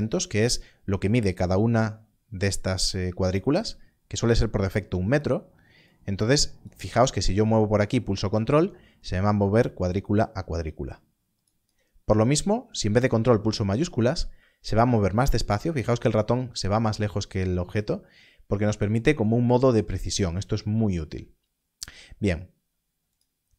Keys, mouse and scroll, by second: 5.1 click, 8.2 ctrl+click, 14.4 click, 23.1 click.